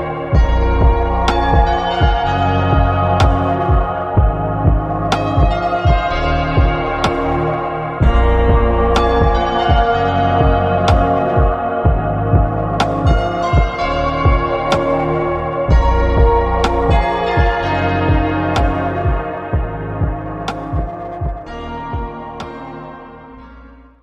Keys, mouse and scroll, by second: 4.5 click, 5.9-8.7 middle drag, 11.4 click, 12.4 click, 13.8-14.4 middle drag, 14.4-18.9 drag, 14.4-18.9 right drag.